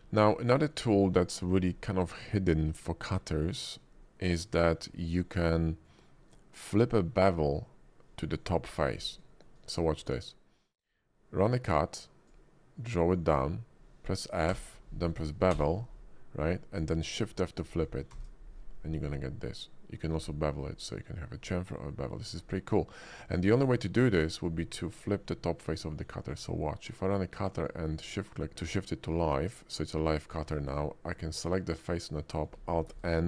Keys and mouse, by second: 0.5 shift+drag, 3.4 shift+drag, 3.6 shift+middle click, 4.0 middle click, 5.2 shift+middle click, 5.7 middle click, 8.6 middle click, 9.3 shift+middle click, 9.6 middle click, 10.8-12.3 drag, 14.5 f, 15.5 b, 18.1 shift+f, 23.2 click, 24.1 click, 24.6-25.1 middle drag, 25.8-26.3 drag, 27.6 shift+click, 28.6 drag, 28.9 middle drag, 30.4 Tab, 31.1 click, 31.8 middle click, 32.9 alt+n.